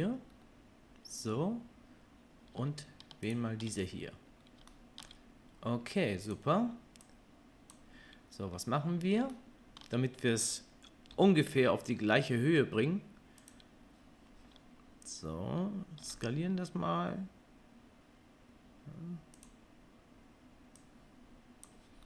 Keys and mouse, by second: 0.4-7.0 middle drag, 7.0-13.5 drag, 11.1 g, 13.5-20.8 middle drag, 16.0 s, 20.8-22.0 drag.